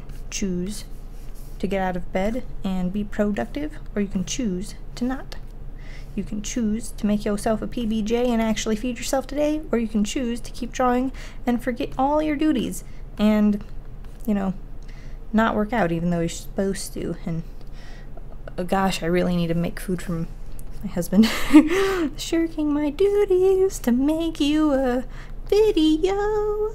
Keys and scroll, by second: 4.8 ctrl+z, 22.9 ctrl+z.